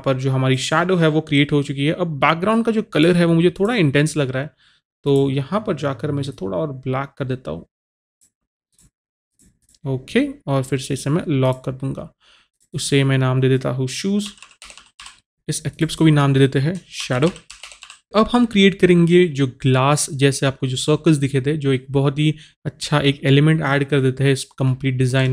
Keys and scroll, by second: 14.3-15.0 typing, 17.0-17.8 typing.